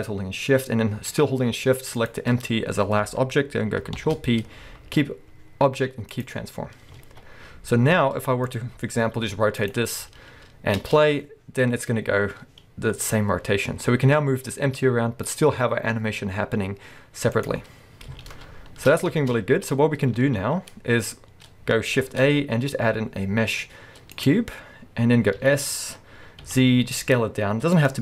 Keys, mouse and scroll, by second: 2.0 shift+click, 2.3-2.8 shift+scroll up 1, 2.8-3.9 scroll up 1, 3.9 ctrl+p, 7.0 alt+a, 7.3-8.5 scroll down 1, 8.5 click, 8.7 scroll up 1, 9.1 r, 9.7 click, 9.8-10.8 scroll down 1, 10.8 space, 19.2 space, 20.0-20.9 scroll up 1, 20.9-21.5 scroll down 1, 22.0 shift+a, 24.5-25.4 scroll up 1, 25.4 s, 27.9 click.